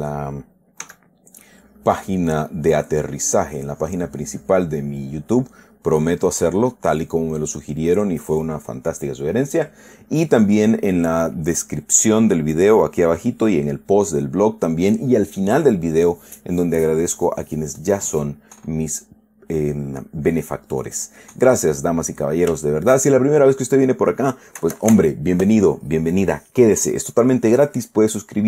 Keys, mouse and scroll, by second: 1.2 s, 1.8 click, 2.8-3.9 drag, 5.3 click, 6.4 click, 7.1 click, 7.7-8.9 drag, 18.6-20.1 middle drag, 20.5-21.6 drag, 21.7 middle click, 23.0 shift+click, 23.1 shift+middle click, 23.5 shift+click.